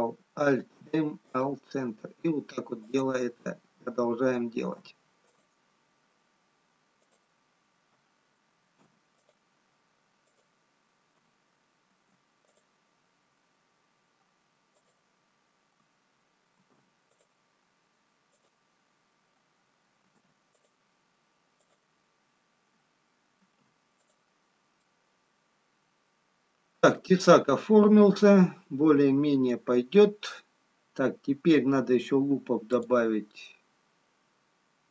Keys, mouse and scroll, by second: 0.7 alt+m, 5.6 alt+space, 5.6 alt+m, 7.2 click, 8.7 alt+m, 10.6 click, 12.2 alt+m, 14.7 click, 16.7 alt+m, 18.3 click, 20.1 alt+m, 25.0 middle click, 33.2 click.